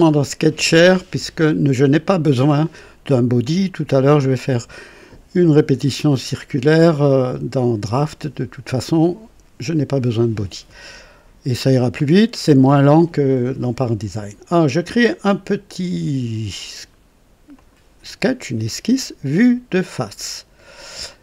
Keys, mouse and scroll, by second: 17.5 click, 19.9 click, 21.1 click.